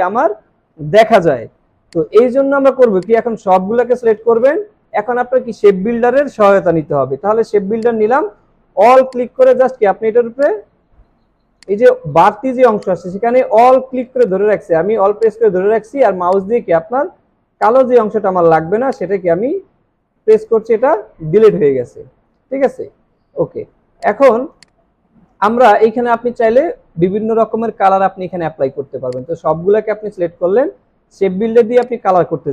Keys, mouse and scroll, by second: 9.1 alt+click, 10.4 alt+click, 14.2 alt+click, 17.6 alt+click, 19.0 alt+click, 20.2 alt+click, 24.5 double click.